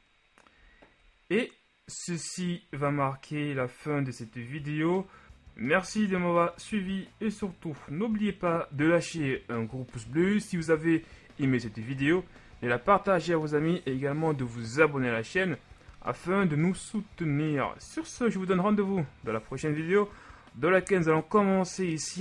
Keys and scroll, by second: 0.0 a, 2.9 z, 5.9 z.